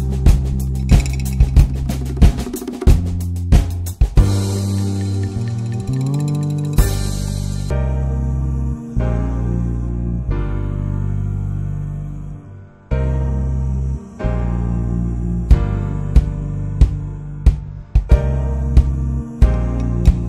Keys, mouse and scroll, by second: 0.6 middle click, 0.8 scroll up 1, 1.2 click, 1.8 alt+z, 2.1 middle click, 2.2-2.7 scroll up 1, 2.7 click, 5.6 middle click, 5.9 ctrl+z, 6.2 shift+middle click, 6.4 alt+z, 6.7 ctrl+click, 7.2 middle click, 8.1 ctrl+z, 8.3 ctrl+z, 9.2 ctrl+click, 9.6 alt+middle click, 10.0 alt+z, 10.4 ctrl+s, 10.7 alt+z, 11.0-12.2 shift+middle drag, 12.2 alt+z, 12.6 ctrl+s, 12.8 click, 13.6-15.3 middle drag, 15.3 3, 15.4 click, 15.8 middle click, 16.3 i, 17.5 Tab, 17.6-18.4 middle drag, 18.4 Tab, 18.4-19.7 middle drag, 19.7 click, 20.1 ctrl+z.